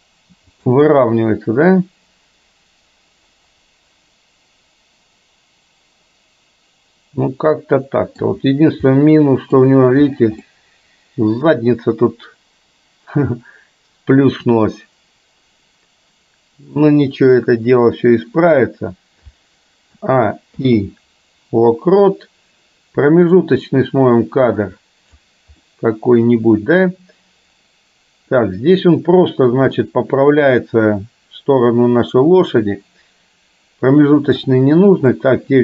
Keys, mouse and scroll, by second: 0.9 scroll up 1, 1.0-8.3 middle drag, 8.3 scroll down 1, 9.0 middle click, 10.5 scroll up 1, 10.6-18.6 middle drag, 20.0 a, 20.6 i, 23.4-25.3 drag, 25.6-28.5 middle drag, 29.9-34.5 drag, 35.1-35.6 middle drag.